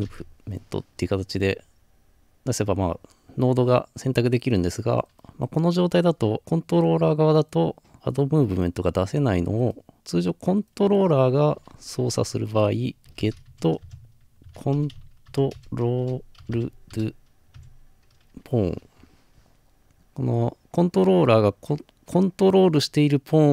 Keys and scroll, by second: 0.0-0.3 typing, 13.1-16.4 typing, 19.8 typing.